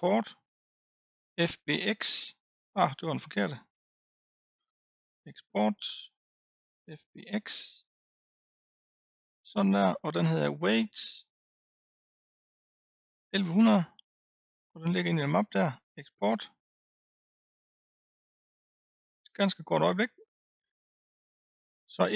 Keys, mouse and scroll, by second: 5.1-8.6 drag.